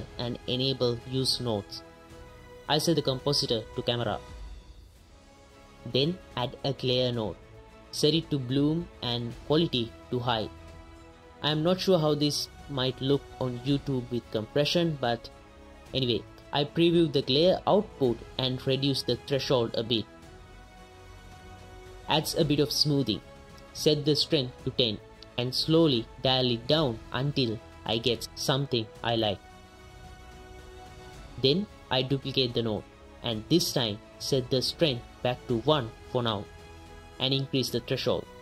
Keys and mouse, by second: 0.3-0.9 right drag, 3.2-5.5 right drag, 5.8 shift+q, 6.0 shift+a, 7.7-9.6 drag, 10.3-10.9 drag, 13.3 ctrl+shift+click, 13.8 ctrl+shift+click, 15.9 click, 17.6-19.3 drag, 19.6 click, 20.7 click, 21.8 click, 22.3 click, 23.7-25.2 drag, 27.0-30.3 drag, 30.4 ctrl+shift+click, 32.3 shift+d, 32.7 click, 34.0 ctrl+shift+click, 34.8 ctrl+shift+click, 36.2 click, 37.5-38.4 drag.